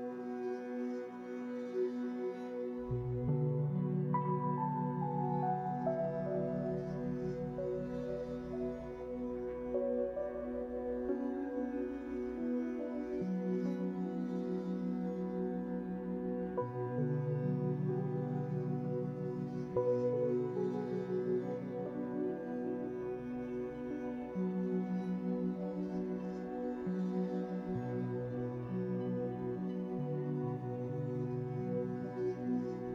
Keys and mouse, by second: 0.2 ctrl+z, 0.2 x, 2.4 Tab, 2.4-3.3 drag, 3.3 Tab, 4.2 shift+middle click, 6.8 ctrl+z, 7.3 ctrl+z, 8.0 ctrl+z, 8.6 ctrl+z, 9.9-12.3 middle drag, 13.5 Tab, 14.0 Tab, 14.4 Tab, 14.7 Tab, 15.8 Tab, 16.2 Tab, 16.6 Tab, 16.9 Tab, 17.8 ctrl+r, 25.7 Tab, 27.3 Tab.